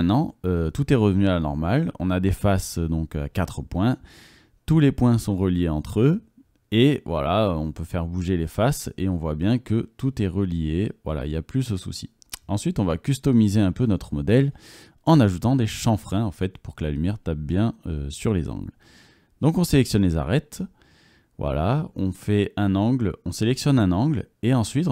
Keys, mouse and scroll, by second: 0.7 middle click, 1.4 right click, 1.5-2.7 middle drag, 2.5 right click, 2.7 click, 2.9 right click, 3.5 click, 5.3-7.9 drag, 5.3 3, 5.7 middle click, 5.7 right click, 6.7 g, 7.9 middle click, 9.1 g, 10.0-12.7 middle drag, 10.9 g, 12.7 g, 13.3 middle click, 15.3 Tab, 15.5 middle click, 16.2 Tab, 16.5 middle click, 17.5 2, 19.3-20.5 middle drag, 21.1 click, 21.9 alt+middle click, 22.2 alt+click.